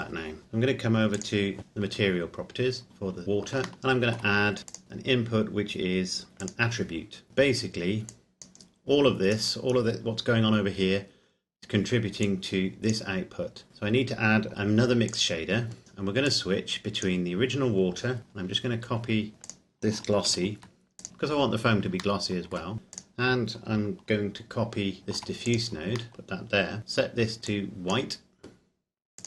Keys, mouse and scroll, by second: 1.2 click, 2.9-3.4 scroll down 1, 3.7 shift+middle click, 4.7 click, 6.4 click, 7.3 shift+middle click, 7.5-8.0 scroll up 1, 8.0 click, 9.3-11.2 scroll down 1, 11.2-12.3 scroll up 1, 12.3 click, 13.7-14.5 scroll down 1, 15.2 click, 16.6 click, 17.7-19.5 scroll down 1, 19.5 click, 20.3 shift+d, 21.1-22.1 scroll up 1, 22.4 shift+middle click, 23.1 click, 25.0 shift+d, 25.7 click, 27.8 click.